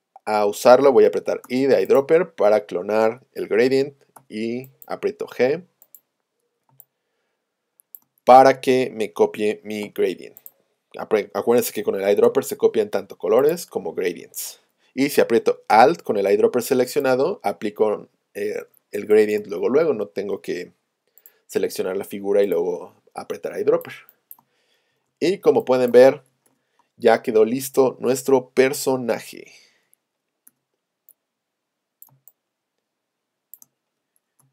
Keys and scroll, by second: 1.5 i, 4.2 g, 6.7 space, 9.9 v, 12.3 i, 25.0 super+0, 27.3 shift+super+a, 29.0 v, 30.5 z, 32.1 space.